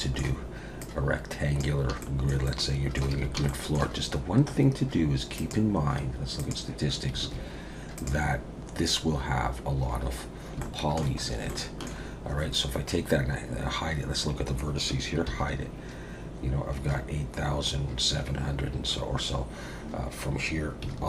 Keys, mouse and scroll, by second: 0.0 shift+a, 0.8 click, 2.0 shift+middle click, 2.4 middle click, 3.1 a, 3.5 shift+middle click, 5.4 click, 7.2 alt+a, 7.9 click, 10.3 scroll up 2, 10.6 shift+middle click, 11.3 scroll up 1, 11.5 shift+middle click, 15.3 h.